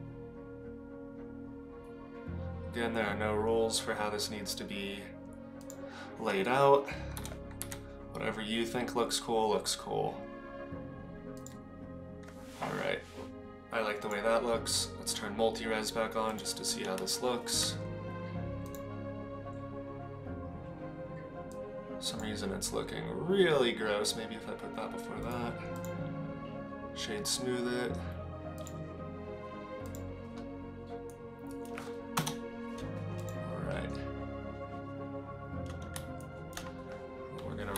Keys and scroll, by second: 7.1 g, 32.1 KP_0.